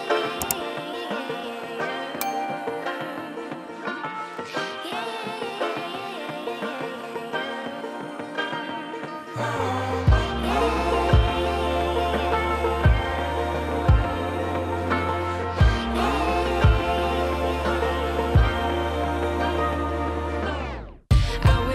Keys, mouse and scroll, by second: 2.2 shift+a, 2.7 scroll down 3, 3.2 KP_7, 3.9 g, 5.7 KP_1, 6.2 g, 7.7 click, 11.2 KP_0, 11.9 scroll up 4, 15.9 click.